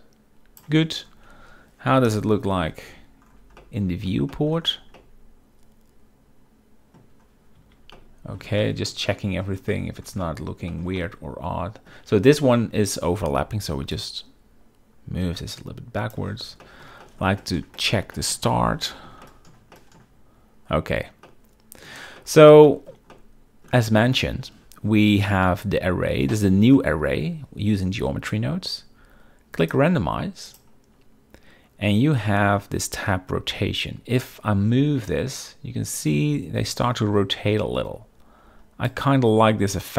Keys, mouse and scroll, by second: 2.2 KP_0, 2.8 z, 3.7-4.2 middle drag, 4.4 shift+middle drag, 5.1-7.1 middle drag, 8.1-8.5 middle drag, 8.7 shift+middle click, 9.2 shift+middle click, 9.8 shift+middle click, 10.3 middle click, 10.8 middle click, 11.1-12.0 shift+middle drag, 14.0-16.4 shift+drag, 16.7 shift+middle drag, 17.1 shift+middle click, 17.5 shift+middle click, 17.5-18.4 shift+scroll, 17.9 shift+middle click, 18.3 shift+middle click, 18.6 shift+middle click, 19.0 shift+middle click, 19.3 shift+middle click, 19.6-20.9 shift+scroll, 19.9 shift+middle click, 21.4-22.0 middle drag, 22.3 middle drag, 22.8 shift+middle drag, 23.2-23.8 middle drag, 29.7 click, 30.6 click, 34.4-36.1 drag, 36.9-39.1 drag, 39.8-39.9 drag.